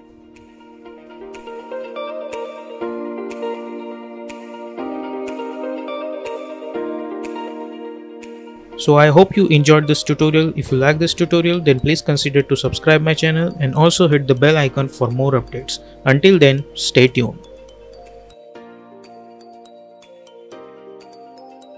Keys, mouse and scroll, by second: 1.1 typing.